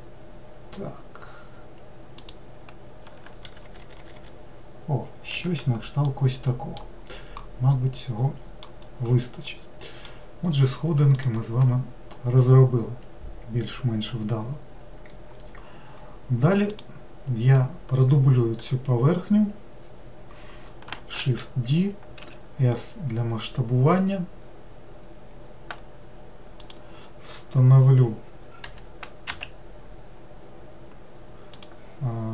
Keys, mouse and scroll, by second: 3.5-4.0 shift+r, 6.0-7.0 middle drag, 7.0-7.7 scroll down 1, 7.7-8.8 middle drag, 8.8-9.5 scroll down 1, 9.5-12.6 middle drag, 16.7 click, 21.2 shift+d, 28.7 g.